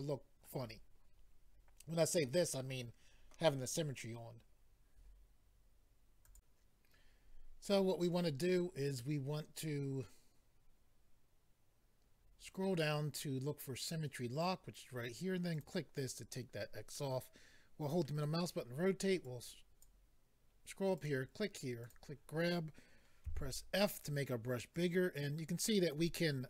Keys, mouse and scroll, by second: 6.2 click, 6.3 click, 11.8-12.6 scroll down 5, 13.3 scroll down 1, 15.5 click, 15.6 click, 16.9 middle click, 19.2 click, 20.9 click, 21.0 click, 21.8 click, 21.9 click, 23.2 click, 23.9 click, 23.9 f, 24.0 click, 24.7 click, 25.7 click.